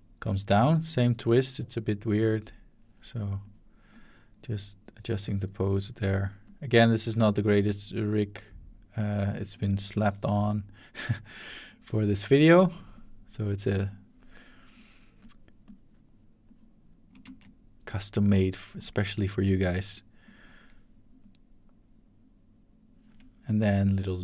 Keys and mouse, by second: 1.1 shift+middle click, 1.3-1.9 shift+drag, 2.2 shift+click, 3.4 click, 4.5 click, 6.4 click, 7.8 click, 9.8 shift+middle click, 11.3-12.4 drag, 13.9 click, 14.7 click, 15.6 click, 16.5 click, 17.2 ctrl+z, 17.4 ctrl+click, 18.8 click, 20.2 shift+click, 21.2-22.9 drag, 24.0-24.2 shift+drag.